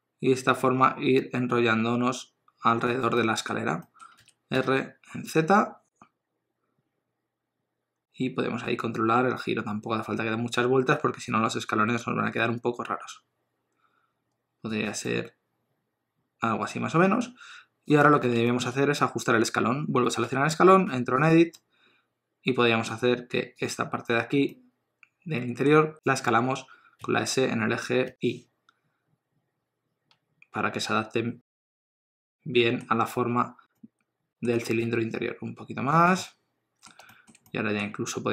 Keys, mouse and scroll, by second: 3.1 middle click, 4.2 r, 15.1 middle click, 18.0 click, 18.5 shift+middle click, 20.3 Tab, 20.9 3, 21.2 click, 23.3 middle click, 23.6 click, 24.5 middle click, 26.0 s, 27.0 s, 31.8 middle click, 34.6 s, 36.3 middle click, 37.1 shift+middle click, 37.5 middle click.